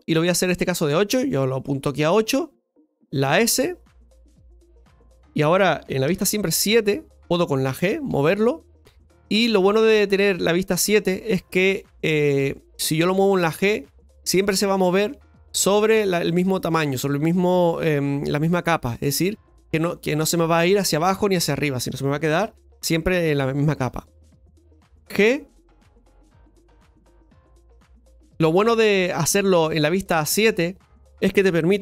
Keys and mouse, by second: 5.2 s, 8.2 g, 20.5-22.3 middle drag, 22.3 KP_7, 28.3 ctrl+z.